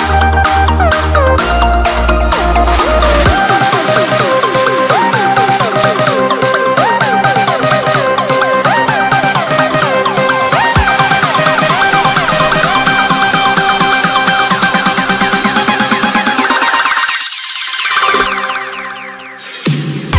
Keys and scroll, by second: 1.1 e, 1.7 Escape, 2.0 F2, 8.9 c, 9.4 Escape, 11.5 F3, 16.1 space, 17.1 c, 17.9 Escape, 19.8 ctrl+z.